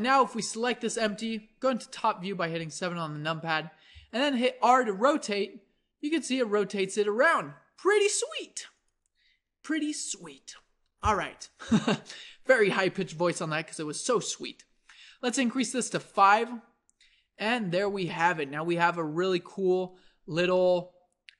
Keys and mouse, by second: 1.9 KP_7, 4.0 r, 9.7-18.3 drag, 18.3-21.3 middle drag.